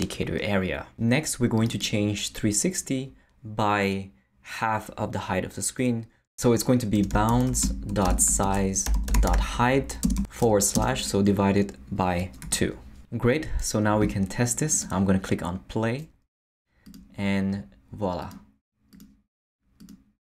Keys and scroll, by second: 6.7-10.7 typing, 12.4 2.